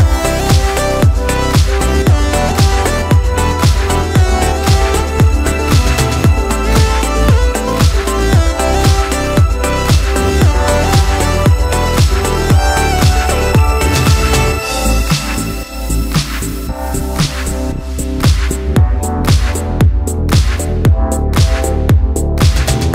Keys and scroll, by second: 10.7 ], 14.4 [.